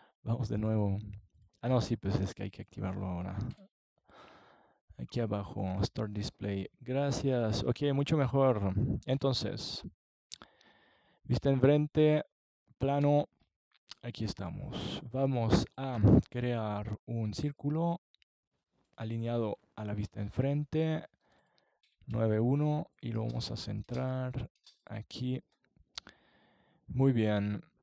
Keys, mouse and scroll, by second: 3.4 n, 5.6 KP_1, 6.8 KP_5, 7.1 KP_5, 9.8-11.4 drag, 14.5 click, 15.3-20.1 drag, 20.1 middle click, 20.5 scroll up 1, 20.6 click, 26.2-27.8 middle drag.